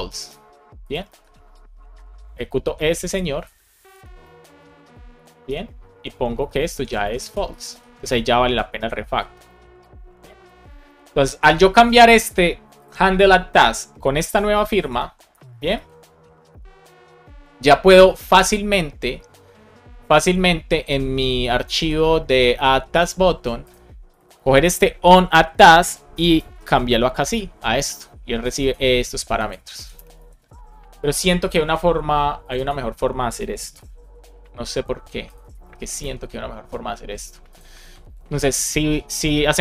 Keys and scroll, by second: 0.9 super+v, 4.8 Right, 5.0 Left, 5.3 BackSpace, 5.8 Up, 6.3 shift+super+Right, 6.6 super+c, 6.7 Down, 7.1 super+Right, 7.4 Return, 7.5 super+v, 8.0 Left, 8.7 alt+shift+Left, 10.3 alt+shift+f, 10.8 super+s, 14.6 Return, 15.2 shift+super+Left, 15.4 BackSpace, 15.6 super+s, 21.6 ctrl+Tab, 25.2 Right, 25.7-27.2 typing, 28.8 super+c, 29.6 super+v, 29.8 space, 30.1 super+s, 33.6 super+c, 35.5 super+v, 35.9 super+s.